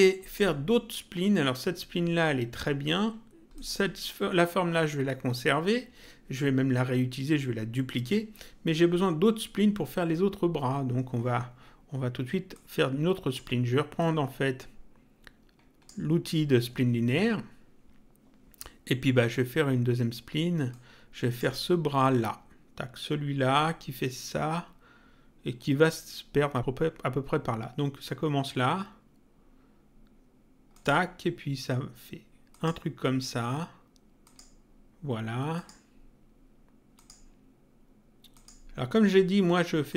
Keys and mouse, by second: 3.5 click, 12.5 click, 13.9 click, 20.6 click, 30.7 click, 32.5 click, 34.2 click, 35.5 click, 36.9 click, 38.3 click, 39.9 click.